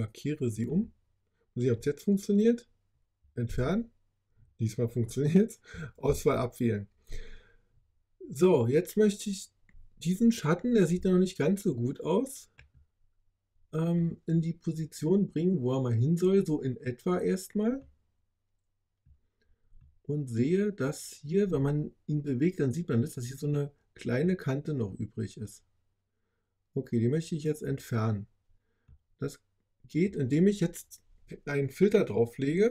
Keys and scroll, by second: 3.4 BackSpace, 5.9 super+d.